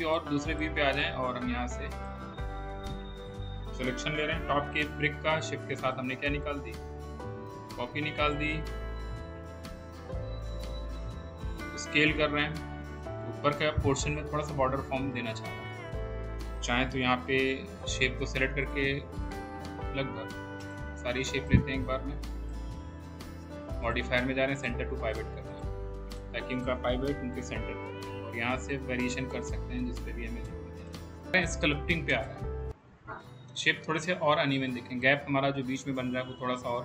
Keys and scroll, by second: 4.5 w, 9.6 r, 27.8 r.